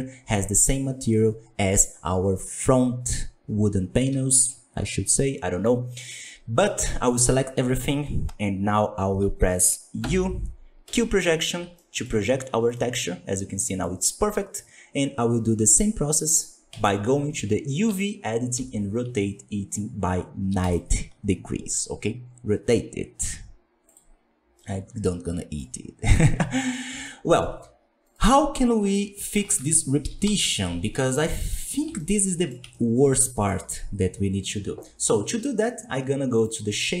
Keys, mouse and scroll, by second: 4.0 a, 6.5-10.9 middle drag, 10.9 u, 11.5 Tab, 11.7-16.7 middle drag, 16.7 click, 17.8 a, 18.5 r, 23.9 click, 24.5-25.6 middle drag, 25.6-26.4 scroll up 3, 27.0-28.0 shift+middle drag, 28.0 right click, 28.6 scroll down 1, 28.9 middle click, 29.4 alt+a, 30.0 KP_1, 30.2 KP_5, 30.7-31.0 scroll down 2, 31.0-36.4 shift+middle drag, 36.4-37.0 drag.